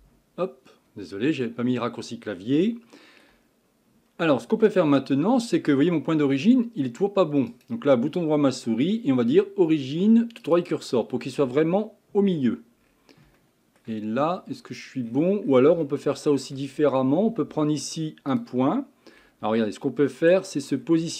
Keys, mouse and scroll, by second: 0.0 n, 1.1-2.1 scroll up 2, 2.1-2.7 scroll down 1, 2.7-3.7 shift+middle drag, 3.7-4.1 scroll up 2, 4.1-4.9 scroll down 2, 4.9 Tab, 5.2-7.5 scroll up 5, 7.5-12.3 right drag, 12.3-12.8 scroll down 5, 12.8-13.4 scroll up 7, 13.4-14.0 shift+middle drag, 14.0-14.9 scroll up 10, 14.9-15.6 scroll down 13, 15.8-16.7 shift+middle drag, 16.7 scroll up 7, 17.0 scroll down 1, 17.3 Tab, 18.3 click, 19.1 scroll down 1, 19.5 Tab, 20.3-20.8 scroll up 5, 20.8 scroll down 4.